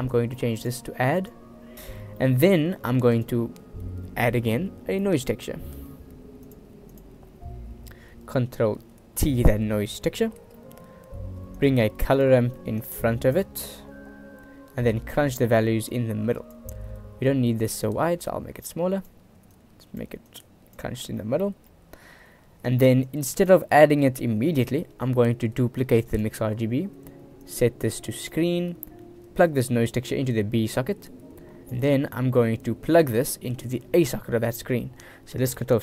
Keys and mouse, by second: 0.3 right click, 1.3-1.9 right drag, 2.4 click, 3.2 shift+a, 8.1 click, 9.4 ctrl+t, 10.0 click, 10.7 click, 11.7 click, 11.9 shift+d, 13.0-13.5 drag, 15.0-15.5 drag, 16.1-16.7 drag, 18.0-19.2 drag, 19.7 click, 20.5 click, 21.4 middle click, 21.9 middle click, 23.2 click, 23.8 middle click, 25.4 shift+d, 27.6-28.5 drag, 29.1-30.9 drag, 31.6 click, 33.0-34.3 drag.